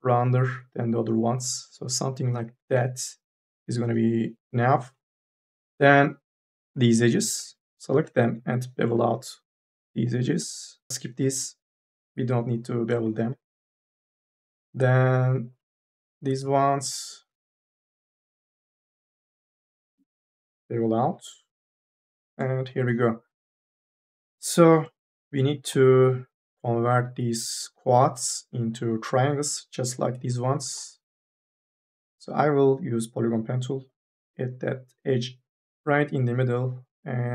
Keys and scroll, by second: 5.0 e, 8.2 m, 8.5 s, 10.9 e, 11.2 2, 19.2 m, 19.8 s, 23.1-25.6 typing, 30.4 1, 30.9 m.